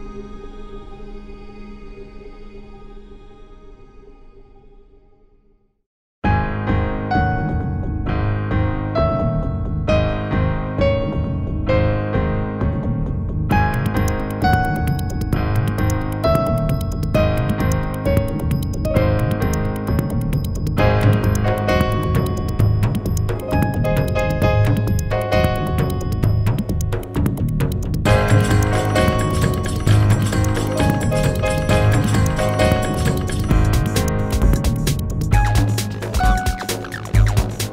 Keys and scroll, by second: 8.2 BackSpace, 11.5 BackSpace, 16.2 BackSpace, 24.8 BackSpace, 29.3 BackSpace, 31.9 BackSpace, 33.5 ctrl+z.